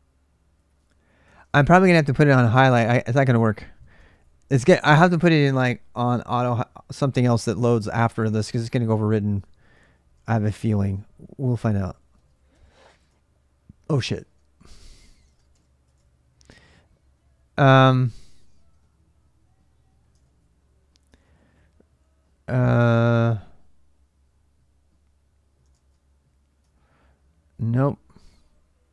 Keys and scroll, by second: 0.0-2.1 typing, 0.6 ctrl+[, 1.0 ctrl+[, 3.8 ctrl+[, 3.9 typing, 9.2 ctrl+[, 9.3 ctrl+j, 10.2 shift+z, 10.4 shift+z, 11.8-12.1 typing, 12.3 Tab, 12.8 Return, 13.8-15.6 typing, 15.6 Return, 18.3 :, 19.9 ctrl+[, 20.0 ctrl+j, 20.0 k, 20.9 ctrl+[, 20.9 ctrl+j, 21.0 k, 22.4 typing, 25.4 typing, 26.4 ctrl+[, 26.6-28.9 typing.